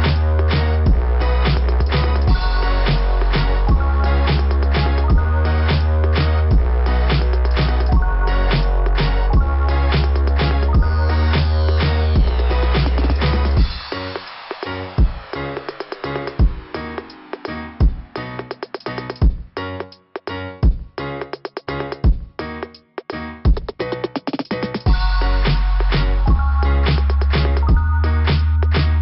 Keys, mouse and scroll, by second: 0.7 scroll up 2, 2.0 scroll up 1, 2.4 click, 3.5 click, 5.8 click, 7.0 click, 7.9 click, 8.2 click, 9.9 click, 10.6 click, 12.5 scroll up 2, 27.4 scroll down 2.